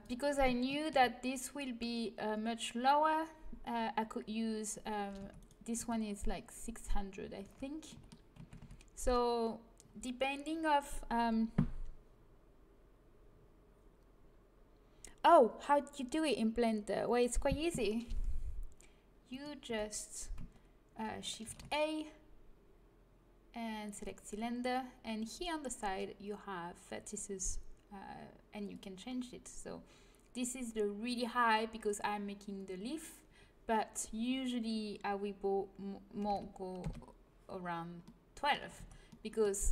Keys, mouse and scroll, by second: 5.1 Tab, 5.7 Tab, 7.4 Tab, 8.5 z, 14.0-19.2 middle drag, 19.2 right click, 19.6 Tab, 21.4 shift+a, 28.6-33.7 drag, 38.0 middle click, 38.7 Tab.